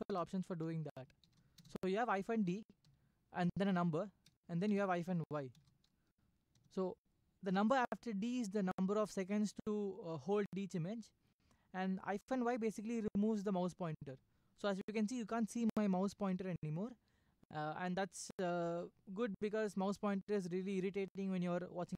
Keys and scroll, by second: 0.0-1.8 typing, 2.8 3, 5.0-5.5 typing, 6.5 Return.